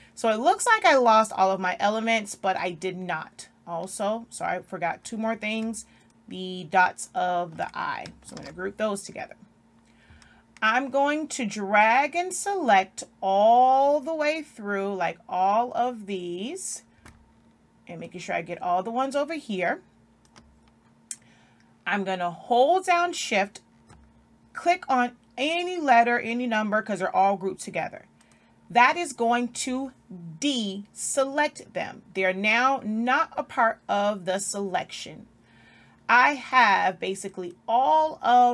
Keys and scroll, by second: 8.3 ctrl+g.